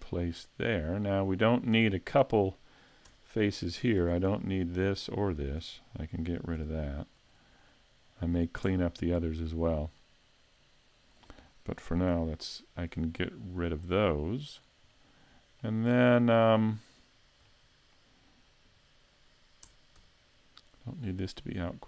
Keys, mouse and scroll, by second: 2.1 middle click, 3.1 Tab, 4.0 ctrl+Tab, 4.7 right click, 5.4 shift+right click, 6.6 x, 7.7 middle click, 8.7 Tab, 9.4 click, 11.9 KP_3, 13.8 click, 14.9 middle click, 15.9-16.5 scroll down 2, 16.5 middle click, 16.5 scroll down 2, 17.5 middle click, 18.7 KP_5, 19.7 Tab, 20.7 right click, 21.6 click.